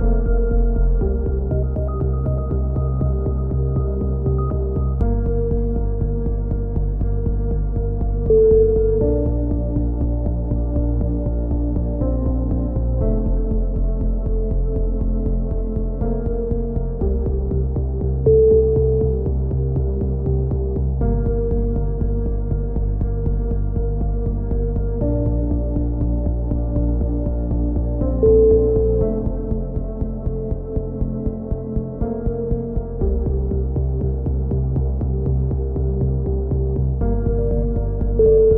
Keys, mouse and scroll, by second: 1.3 click, 2.0 middle click, 2.2 click, 3.0 Tab, 3.3 click, 5.0 Tab, 6.0 right click, 6.5 x, 7.4 click, 8.4 middle click, 10.5 right click, 11.6 right click, 12.4 KP_3, 12.8 z, 14.0-16.5 typing, 17.2-20.0 drag, 18.5 right click, 18.7 z, 20.0 a, 20.3 z, 20.5 Tab, 21.0-22.0 drag, 24.0 Tab, 24.4-26.1 drag, 26.7 middle click, 27.1 click, 27.6 KP_3, 28.0 z, 29.3 middle click, 30.0 click, 31.0 right click, 31.4 KP_3, 31.9 s, 32.8 ctrl+z, 33.0 e, 34.3 click, 35.2 z, 35.4-36.4 drag, 36.9 click, 37.8 middle click.